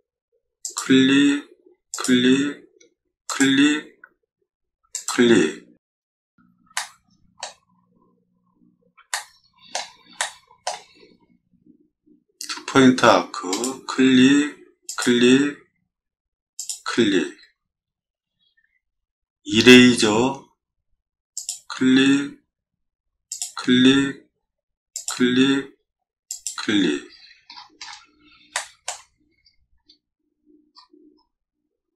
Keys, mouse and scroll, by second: 0.6 click, 1.9 click, 3.3 click, 4.9 click, 5.9 scroll up 2, 6.7 shift+middle click, 9.1 shift+click, 10.2 shift+click, 10.5 shift+middle drag, 11.1 middle click, 11.2 middle click, 11.3 middle click, 12.6 a, 13.5 click, 14.9 click, 16.6 click, 19.6 e, 21.4 click, 23.3 click, 24.9 click, 26.3 click, 27.0 middle click, 27.0-27.4 scroll down 2, 27.5 middle click, 27.6 middle click, 27.8 middle click, 28.5 shift+middle click, 29.2 middle click, 29.2-29.9 scroll, 29.3 middle click, 29.4 middle click, 29.5 middle click, 29.8 middle click, 29.9 middle click, 29.9 scroll up 1, 30.7-31.3 scroll up 2.